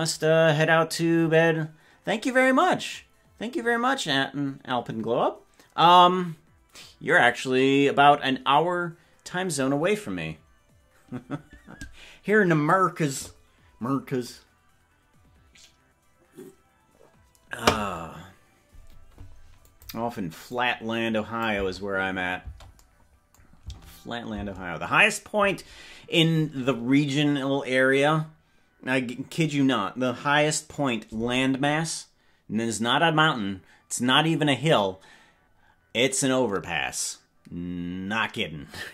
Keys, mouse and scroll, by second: 19.8 click, 20.6-21.7 drag, 21.7 space, 22.5 space, 23.6 space, 24.6 space.